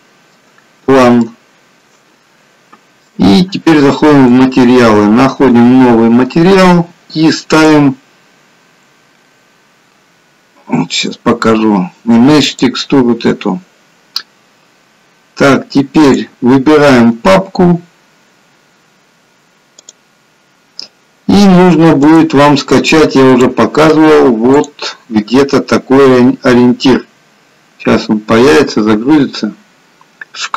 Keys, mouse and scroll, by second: 0.7-1.3 scroll up 3, 1.3 shift+middle click, 1.3-2.0 scroll up 1, 4.4 click, 5.6 click, 18.6 click, 19.8 click.